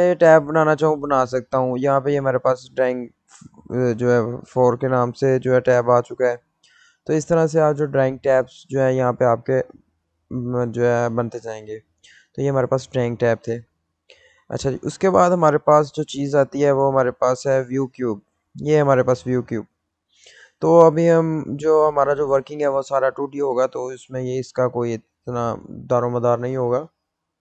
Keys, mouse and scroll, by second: 1.3 click, 11.1 click, 17.0 click.